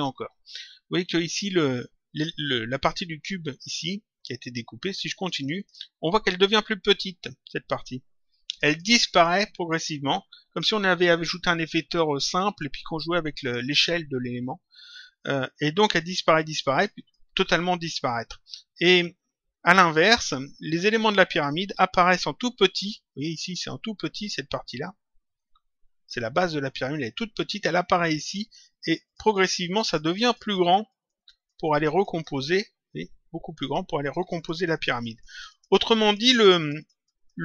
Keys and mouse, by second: 5.1 click, 8.4 click, 15.1 click, 28.7 click, 33.9 click.